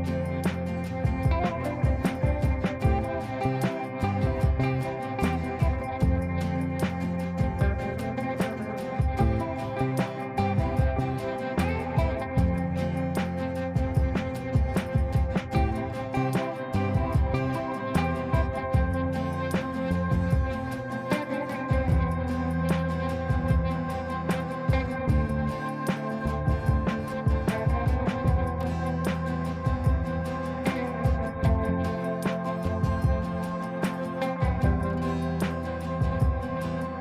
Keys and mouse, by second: 0.3 F3, 0.9 F2, 1.2-1.8 drag, 4.8-5.8 ctrl+click, 5.6 ctrl+space, 5.9-6.9 click, 7.4 F2, 7.8-10.5 drag, 13.6 right click, 14.1-15.1 click, 15.1 F3, 16.2 click, 16.5 F3, 17.4-18.6 drag, 23.5 space, 23.8 shift+click, 24.3 c, 24.5 click, 28.0 space, 30.0 click, 31.5 right click, 32.9 click, 34.8 right click, 35.3 click, 36.2 ctrl+a.